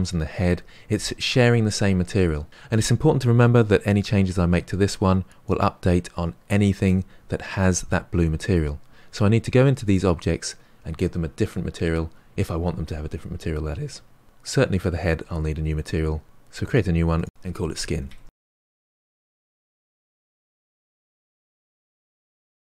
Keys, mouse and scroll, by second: 5.4 click, 9.9 click, 14.2 click, 16.7-18.7 drag, 20.0 click, 21.3 click, 21.5 ctrl+l, 21.7 scroll up 2, 22.0 click, 22.3 click.